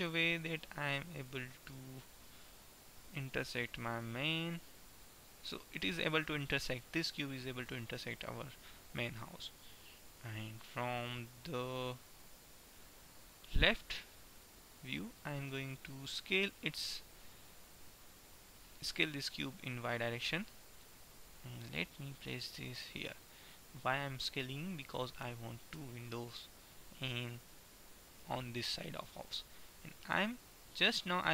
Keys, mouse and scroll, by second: 1.8 middle click, 3.8-4.8 middle drag, 4.8-6.4 drag, 6.4-8.3 middle drag, 12.4 ctrl+KP_3, 13.4 click, 16.4 s, 22.3-23.9 drag, 25.6 shift+d.